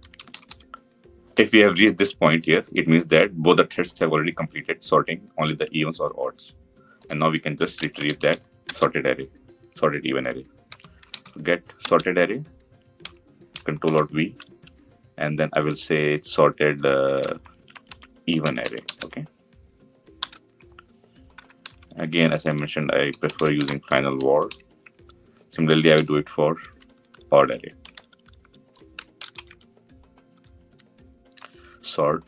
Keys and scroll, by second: 8.5 Return, 14.5 ctrl+alt+v, 25.8 ctrl+d.